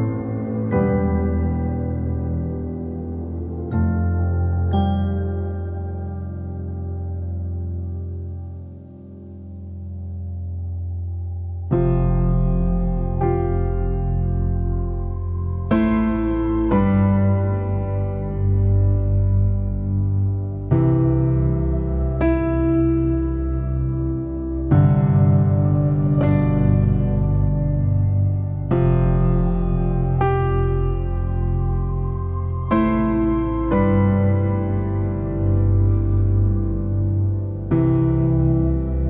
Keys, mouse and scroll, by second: 0.0-0.4 shift+scroll up 1, 0.4 click, 2.1 shift+middle click, 2.2-2.6 shift+scroll up 2, 2.6 click, 3.7 click, 3.9 scroll up 2, 4.5 click, 4.7 shift+click, 5.2 ctrl+l, 5.4 click, 6.2 click, 6.8-7.3 scroll up 2, 7.3-10.0 shift+middle drag, 10.9 shift+middle click, 11.1-11.5 shift+scroll up 2, 12.0 click, 12.7 ctrl+z, 13.3 click, 13.9 ctrl+z, 15.7 click, 16.2 ctrl+z, 18.7-19.1 scroll up 2, 23.1-25.6 drag, 25.6 ctrl+z, 28.8-36.4 drag, 36.4 scroll up 1, 36.9-39.0 drag.